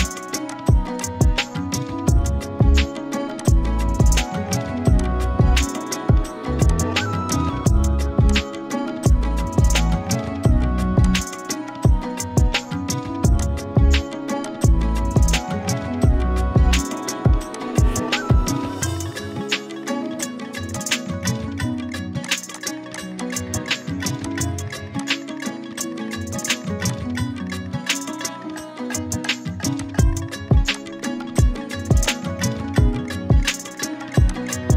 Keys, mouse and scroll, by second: 1.8 right click, 3.3 click, 5.3 right click, 11.3-13.2 shift+drag, 13.3 z, 13.4 click, 13.6 space, 14.1 ctrl+z, 14.4 click, 14.8-15.1 scroll up 1, 15.1-16.9 z, 17.3 space, 17.5 click, 17.8-18.1 space, 18.7 click, 20.2 scroll up 1, 20.4-23.1 typing, 20.7 click, 21.7 click, 22.3 click, 22.6 click, 22.9 click, 22.9 click, 23.2 click, 29.3 click, 33.4 right click, 34.3 click.